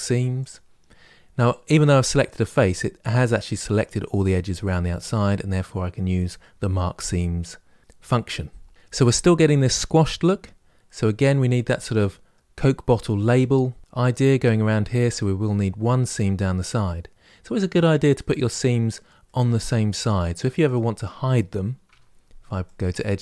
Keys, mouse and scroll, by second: 0.3 ctrl+e, 10.6-17.3 middle drag, 19.0-20.5 middle drag, 20.5 click, 21.7 2, 22.5 click, 22.9 middle click.